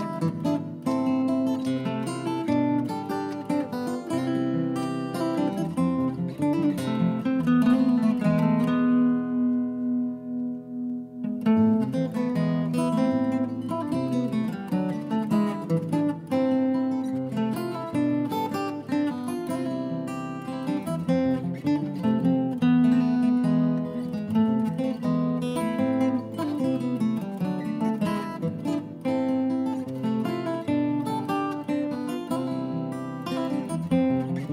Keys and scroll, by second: 3.6 Escape, 3.8 Escape, 5.6 Delete, 8.2 Escape, 10.3 Escape, 10.9 Escape, 12.2 Delete, 12.9 Escape, 13.2 Escape, 19.7 space, 27.1 ctrl+`, 27.4-33.0 typing, 33.4 alt+t.